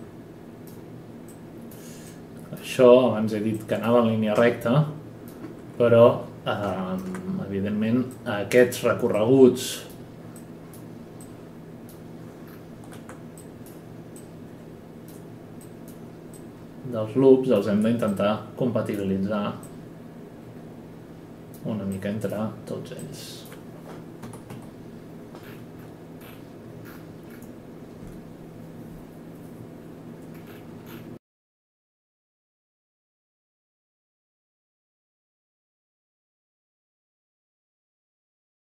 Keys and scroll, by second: 24.2-25.9 typing, 33.0-34.6 typing.